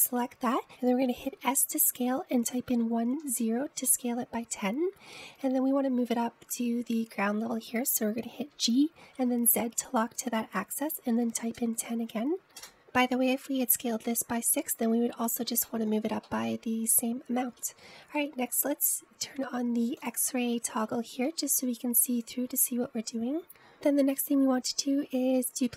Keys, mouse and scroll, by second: 2.5 s, 9.4 g, 14.5-15.5 scroll down 2, 15.5-16.8 scroll down 2, 16.8-18.7 shift+middle drag, 18.7-21.1 scroll up 1, 21.1-21.8 drag, 21.8-22.4 scroll up 1, 22.4-23.7 middle drag.